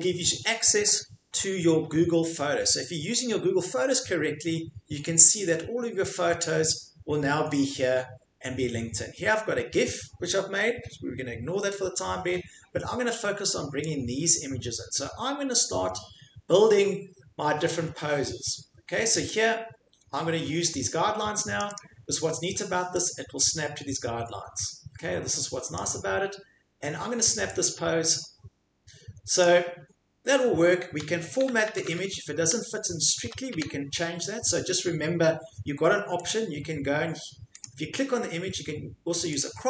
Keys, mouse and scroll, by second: 2.6 scroll down 1, 3.8-4.5 scroll down 2, 13.9 click, 15.6-20.7 drag, 21.6 click, 21.7 click, 23.1 click, 25.7 click, 29.4 click, 31.2 Right, 31.5 Right, 31.9 Right, 32.0 Right, 32.0-34.5 drag, 32.4 Left, 33.3 Right, 33.5 Left, 36.3 middle click, 37.6 click, 39.4 click.